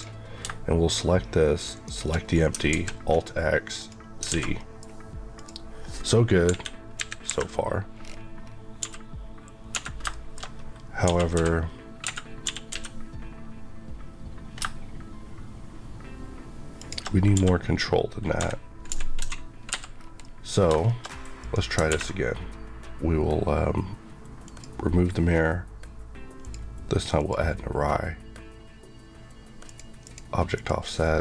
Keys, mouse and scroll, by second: 2.4 alt+scroll down 1, 2.6 alt+x, 3.7 click, 4.2 alt+a, 4.5 middle click, 5.3 click, 6.4 KP_1, 6.9 KP_3, 7.1 KP_Decimal, 7.9 scroll down 1, 8.7 scroll down 1, 8.7 g, 9.6 Escape, 10.0 shift+middle click, 10.1-10.9 shift+scroll down 2, 10.9-11.3 typing, 11.9 Escape, 12.6 typing, 16.7 shift+click, 17.3-19.1 typing, 19.6 Escape, 19.8 scroll down 1, 20.1 middle click, 20.6 shift+middle click, 21.3 click, 24.3 click, 27.1 click.